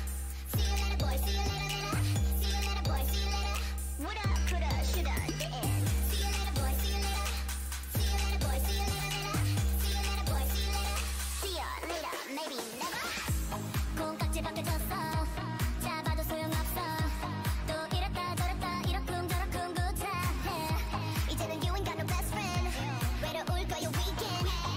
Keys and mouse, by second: 1.8 ctrl+c, 2.7-3.1 ctrl+z, 3.3 ctrl+z, 3.8 ctrl+z, 4.4 ctrl+v, 5.1-6.8 drag, 5.7 g, 8.0 s, 8.8 Tab, 9.1 a, 13.2-17.8 drag, 13.4 a, 13.7 a, 13.9 s, 16.3 right click, 16.6 Tab, 17.6 Tab, 18.3 Tab, 18.8 Tab, 19.4 Tab, 23.1-24.7 drag.